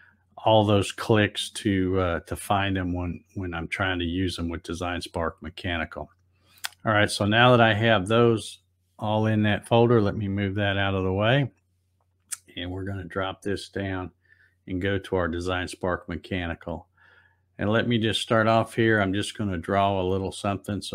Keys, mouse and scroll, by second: 8.1-10.2 drag, 11.4 click, 14.0 click, 17.2 click.